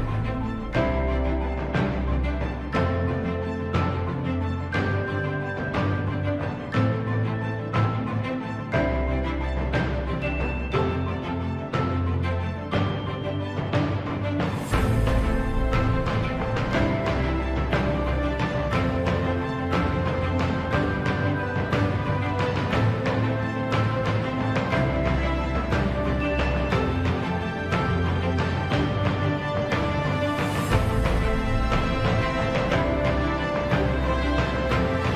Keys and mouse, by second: 0.1 z, 2.3 g, 7.7 g, 14.1 z, 14.9 middle click, 16.0 middle click, 17.5 shift+middle click, 20.1 middle click, 21.1 Tab, 21.5 middle click, 27.4 Tab, 28.2 click, 30.3 z, 31.2 click, 32.3 z, 33.7 shift+d, 34.8 KP_7.